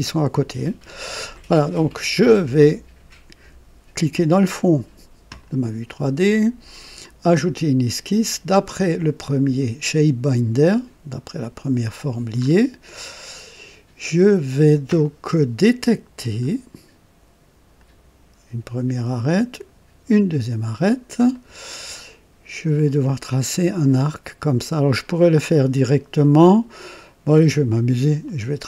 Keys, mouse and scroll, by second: 0.6 click, 5.2 click, 6.9 click, 9.1 click, 11.3 click, 12.3-12.7 scroll up 2, 12.9-13.7 right drag, 16.1 click, 17.7 click, 19.4 click, 20.8 scroll up 1, 21.3 right click, 25.6-26.0 scroll up 2, 26.2 right click, 28.2 click.